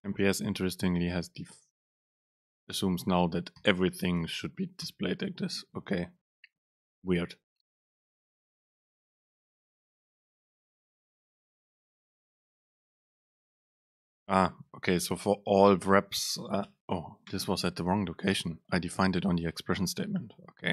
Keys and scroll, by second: 3.7 Delete, 4.9 BackSpace, 9.7 ctrl+shift+super+Left, 10.6 shift+Left, 16.9 BackSpace.